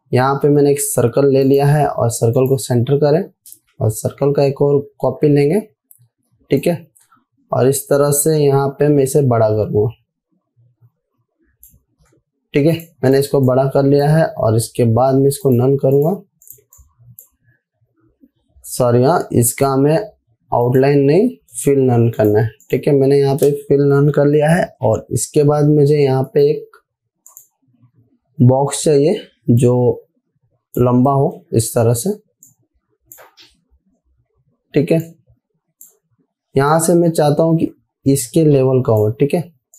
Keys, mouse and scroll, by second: 0.9 v, 1.9 click, 4.6 ctrl+c, 7.1-9.6 alt+drag, 17.5-17.9 drag, 26.7 right click, 27.8 click, 30.1-31.3 drag, 31.8 v, 32.9-33.9 drag, 35.8-36.4 click.